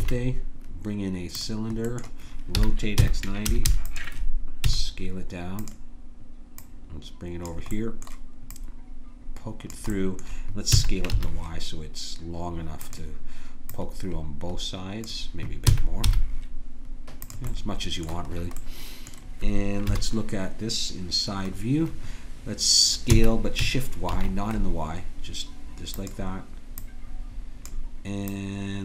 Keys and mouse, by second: 2.6 r, 4.7 s, 6.6-10.7 drag, 10.7 s, 13.7-15.6 drag, 15.7 s, 17.5-18.8 drag, 19.9 KP_1, 23.1 s, 26.8-28.8 drag.